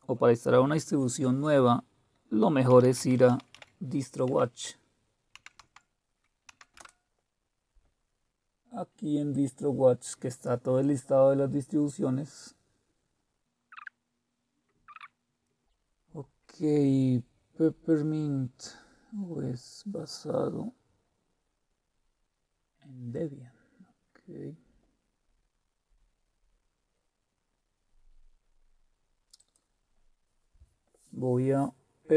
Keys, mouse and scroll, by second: 2.4-4.2 typing, 5.3-5.7 typing, 6.4 Down, 6.8 Return, 9.3 click, 13.4 click, 13.6-14.6 scroll down 2, 14.9 click, 20.7-21.8 scroll down 1, 21.8-23.3 scroll down 1, 23.6-26.5 scroll down 2, 26.5-28.6 scroll up 2, 28.6 scroll up 1, 29.3 click.